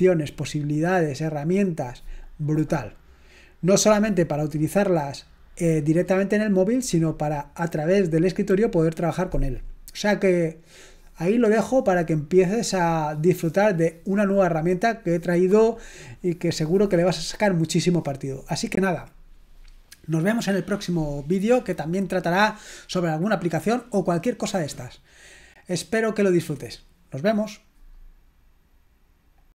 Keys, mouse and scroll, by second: 29.4 click.